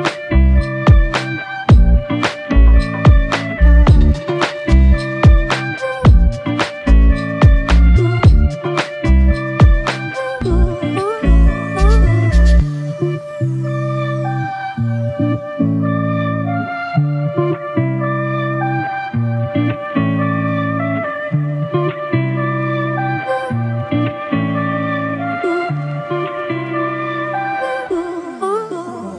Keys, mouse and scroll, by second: 3.4 typing, 3.5 double click, 8.1 alt+click, 9.7 ctrl+alt+click, 13.8 ctrl+alt+click, 15.5 double click, 20.7 double click.